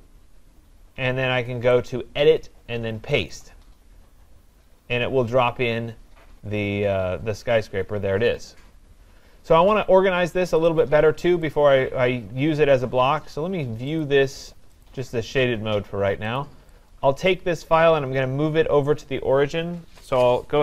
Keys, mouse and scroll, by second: 1.9 click, 3.5 click, 5.5-7.4 scroll, 7.4-8.3 scroll down 10, 10.6 click, 10.8 click, 11.6 click, 12.0-12.4 scroll down 2, 12.4 scroll up 3, 12.6 scroll, 14.0 click, 14.9 click, 16.4 click, 16.5 scroll down 5, 17.6 click.